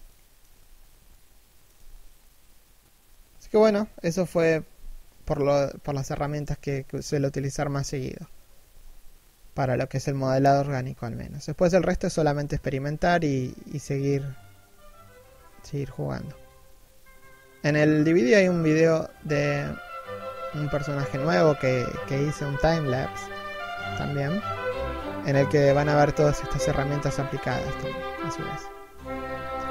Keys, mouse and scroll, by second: 0.3-0.8 scroll down 1, 0.8 shift+middle click, 1.4 z, 12.4 shift+middle click, 12.6 scroll up 1, 12.8-16.9 typing, 13.1 scroll down 1, 13.6 alt+s, 14.0 middle click, 14.3 Tab, 15.7 middle click, 15.9-16.6 scroll down 2, 16.6 scroll up 1, 16.7 middle click, 17.2 scroll up 1, 17.3-17.7 scroll down 1, 17.7 shift+middle click, 17.9-19.7 typing, 18.4 right click, 19.5 right click, 19.9 scroll down 1, 19.9 scroll up 1, 20.2 right click, 20.6 scroll down 1, 20.9 g, 20.9 shift+middle click, 21.2 KP_3, 21.2 middle click, 21.8 middle click, 22.0 scroll down 1, 22.2 middle click, 23.1 scroll up 1, 23.2 g, 23.4 middle click, 23.8 z, 24.2 scroll down 1, 24.3 scroll up 1, 24.5 right click, 24.7 middle click, 24.9 scroll up 1, 25.1 scroll down 1, 25.3 1, 25.4 middle click, 25.7 right click, 26.1 Caps_Lock, 26.4 alt+right click, 26.7-29.0 typing, 27.6 scroll down 1, 27.7 alt+s, 27.9 middle click, 28.0 scroll up 1, 28.4 alt+right click, 28.9 middle click, 29.2 right click, 29.2 shift+middle click, 29.3 right click, 29.4 scroll up 1.